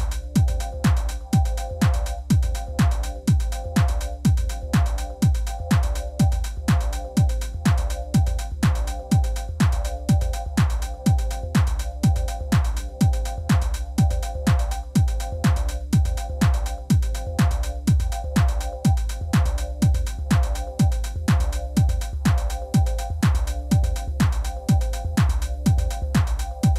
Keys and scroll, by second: 0.7 g, 0.8 z, 2.0 Tab, 2.9 s, 3.0 shift+z, 5.2 g, 5.4 z, 7.0 ., 8.2 ctrl+r, 8.7 Return, 8.9 s, 9.0 x, 10.5 s, 10.6 y, 13.7 Tab, 19.5 Tab, 20.0 1, 20.1 shift+z, 20.9 g, 21.2 x, 22.5 Tab, 23.6 shift+d, 23.7 x, 25.6 shift+r, 26.3 Tab, 26.5 shift+z.